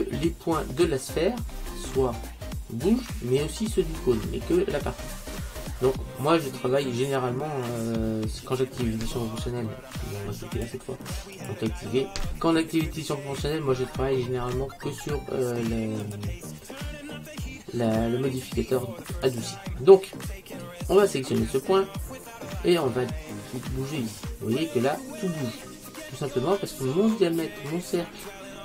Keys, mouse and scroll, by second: 10.6 click, 19.3 click, 23.4 click.